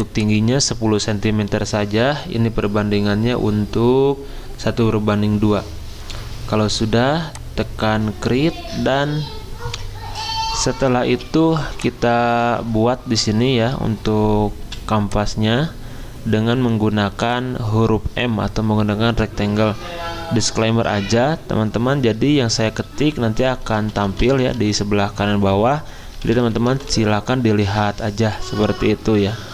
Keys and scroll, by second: 11.1 z, 14.6 m, 23.5-27.3 typing.